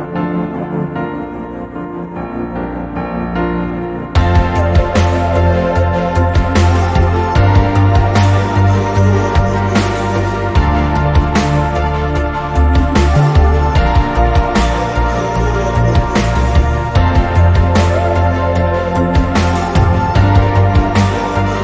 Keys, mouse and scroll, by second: 1.0 Delete, 2.8 Tab, 4.9 click, 5.8-6.6 drag, 6.6-7.1 middle drag, 7.9-8.3 middle drag, 8.5-9.6 drag, 10.5-11.1 drag, 11.6 click, 12.7-16.7 drag, 18.2-18.7 drag.